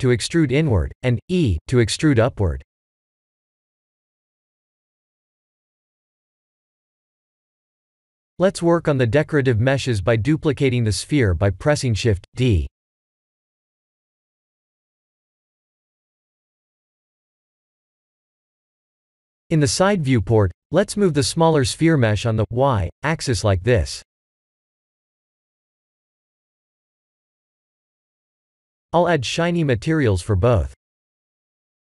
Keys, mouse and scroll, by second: 2.1 e, 3.2 Tab, 3.8 middle click, 6.8 KP_1, 7.6 shift+z, 10.1 click, 11.3 shift+d, 15.5 g, 17.0 s, 19.0 KP_3, 20.1-20.9 scroll up 4, 20.9 g, 23.7 shift+z, 24.4 middle click, 25.4 click, 27.0 click, 27.9 click, 29.1 click.